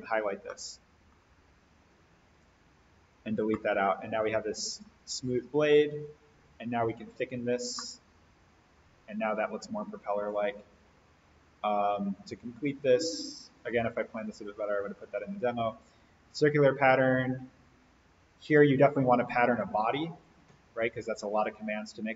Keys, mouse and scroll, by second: 0.3 scroll down 1, 0.5-1.1 middle drag, 2.3 click, 3.4-5.0 middle drag, 6.4-7.0 drag, 7.8-9.3 middle drag, 11.6 click, 16.7-18.4 scroll up 1, 18.4 click.